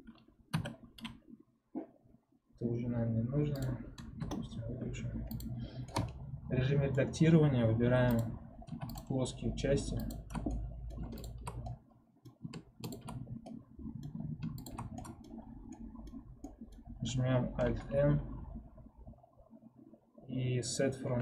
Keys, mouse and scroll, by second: 0.8 3, 4.1-5.3 drag, 5.8-8.1 middle drag, 8.1 click, 10.0 shift+click, 10.4 middle click, 11.1 shift+click, 11.5-13.0 middle drag, 13.0 shift+click, 13.1 scroll down 1, 13.4-14.6 middle drag, 14.6 shift+click, 14.9 middle click, 15.3-15.6 scroll up 1, 15.6 middle click, 16.1 scroll up 1, 16.3-21.2 middle drag.